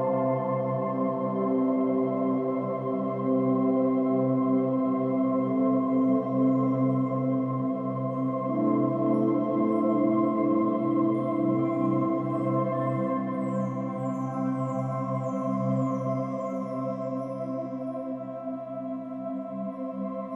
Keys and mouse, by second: 1.8-4.7 typing, 2.9 click, 4.5 click, 6.0 space, 7.6 click, 8.0 space, 9.8 space, 12.2-13.3 drag, 16.0-17.0 drag, 18.2 space.